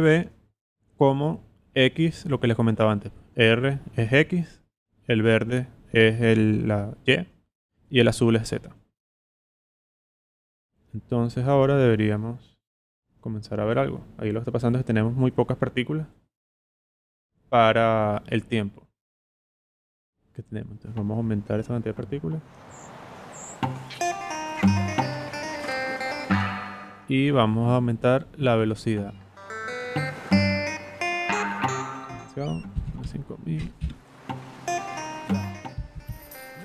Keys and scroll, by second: 32.5-33.3 typing, 35.9 0.